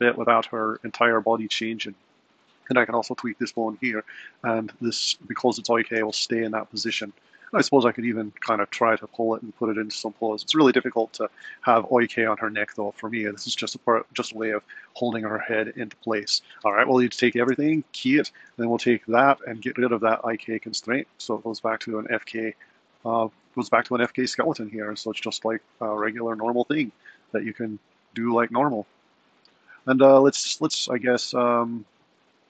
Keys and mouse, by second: 2.0 click, 2.6 r, 7.0 click, 7.7 g, 9.5 g, 14.6 r, 16.8 a, 17.3 i, 18.7 click, 25.2 click, 25.7 r, 27.0 click, 27.6 r, 30.2 click, 30.7 r.